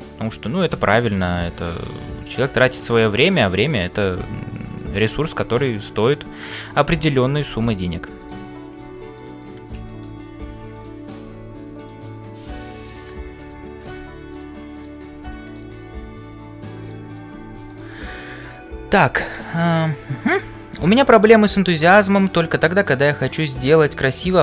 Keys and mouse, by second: 0.0-24.4 typing, 2.6 middle click, 3.7 click, 4.5 middle click, 9.8 middle click, 16.8 click.